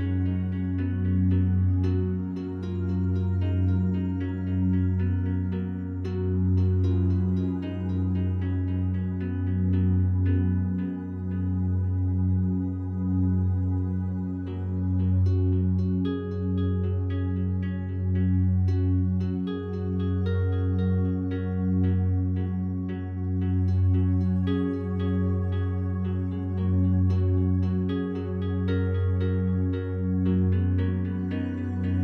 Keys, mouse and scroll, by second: 0.6 alt+click, 1.4 ctrl+alt+click, 2.0 alt+shift+click, 2.7 alt+shift+click, 3.2-4.0 typing, 3.5 alt+click, 6.1-7.1 ctrl+alt+drag, 7.5 ctrl+alt+click, 8.4 ctrl+alt+click, 8.8 alt+shift+click, 9.3 alt+shift+click, 10.6 ctrl+alt+shift+click, 11.1 ctrl+alt+shift+click, 11.7 alt+shift+click, 14.5 alt+click, 15.2 alt+shift+click, 15.7 alt+shift+click, 16.0 alt+shift+click, 16.6-17.7 alt+shift+drag, 20.2 Tab, 21.0 ctrl+s, 21.9 click, 23.3 ctrl+alt+click, 24.1 alt+shift+click, 24.8 click, 25.8 click, 28.7 1, 29.6-31.8 alt+shift+drag.